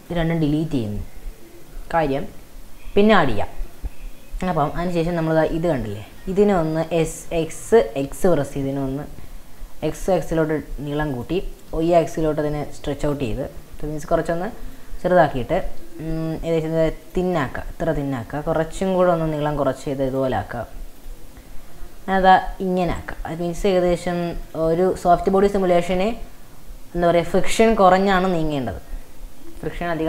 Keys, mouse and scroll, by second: 0.0-1.3 shift+drag, 1.7 x, 4.2-4.8 scroll up 2, 4.8-5.5 drag, 5.5-6.8 middle drag, 6.8 s, 10.2-11.2 middle drag, 11.2 click, 11.7 s, 13.6 s, 15.5 s, 17.4-18.9 middle drag, 18.9 s, 21.0 click, 21.4-22.1 scroll down 2, 23.7 r, 24.9-25.3 scroll up 3.